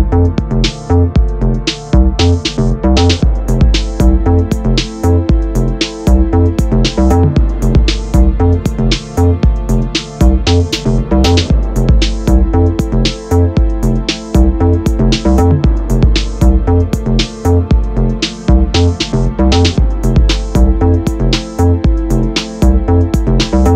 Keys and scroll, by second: 11.4 Right, 12.1 Up, 14.1 Return, 19.0 Down, 21.7 Right, 22.5 Left.